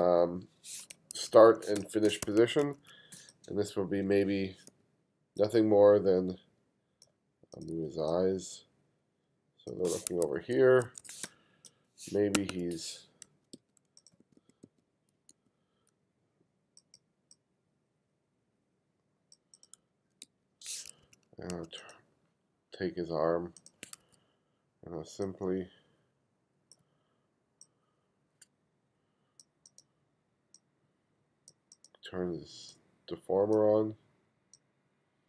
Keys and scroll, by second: 0.0 g, 1.1 2, 1.8 space, 2.2 2, 4.7 b, 7.7 b, 10.1 1, 11.2 space, 12.3 1, 13.2 f, 13.5 g, 14.2 b, 15.8 b, 19.7 f, 20.2 g, 20.8 2, 22.0 2, 24.0 1, 24.5 1.